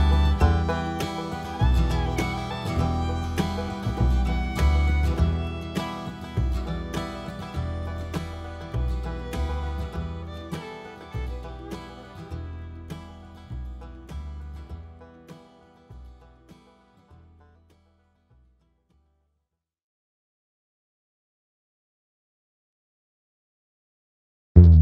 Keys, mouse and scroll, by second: 0.1 KP_7, 0.9 r, 4.4-6.1 drag, 6.1 `, 8.0 g, 8.5 click, 10.4 click, 11.3 `, 11.9-12.2 scroll up 1, 12.2 s, 12.8 right click, 12.9 scroll up 1, 13.2 `, 13.4 s, 15.3 alt+a, 15.4 `, 15.8 click, 16.0 s, 17.6 right click, 18.0 s, 19.2 click, 19.3 alt+a, 19.4 `, 19.9 click, 21.6 scroll down 1, 21.8 `, 22.2 scroll up 1, 24.4 scroll up 1, 24.5 `.